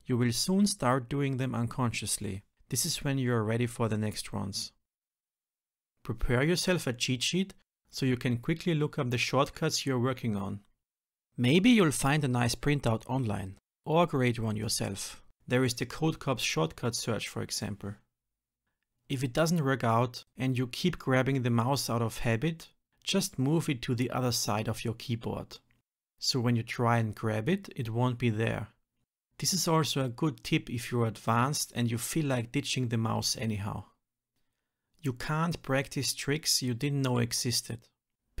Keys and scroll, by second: 0.2 Return, 1.5 shift+F10, 3.3 ctrl+z, 4.0 ctrl+z, 4.7 ctrl+z, 5.2 shift+F10, 17.8 Return, 18.0 shift+F10, 20.8 Return, 21.6 shift+F10, 24.0 ctrl+y, 24.4 shift+F10, 27.6 ctrl+y, 27.9 shift+F10, 32.6 ctrl+alt+m.